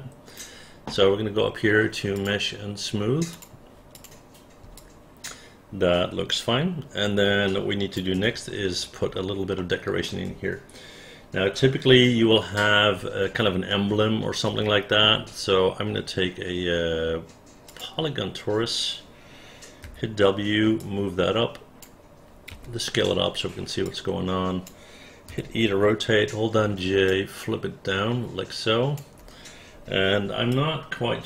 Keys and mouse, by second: 4.0 click, 4.8-8.0 alt+drag, 9.6 alt+middle click, 13.8 alt+middle click, 20.8-21.8 drag, 22.6 r, 23.9 click, 25.3 e, 26.7 j, 27.1-29.0 drag, 30.6-31.2 alt+drag.